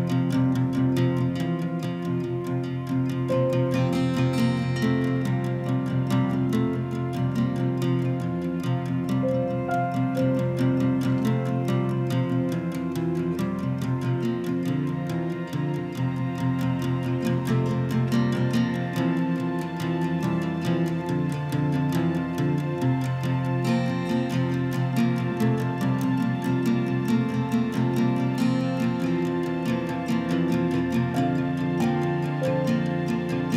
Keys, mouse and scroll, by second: 0.5 click, 6.2 click, 7.0 click, 8.0-8.9 typing, 10.7-16.5 typing, 16.0 click, 17.3 click, 20.8 right click, 20.8 w, 23.0 click, 25.3 click, 26.8-28.7 typing, 27.0 click, 29.2 Return, 31.1 click, 31.1 typing, 32.8 click.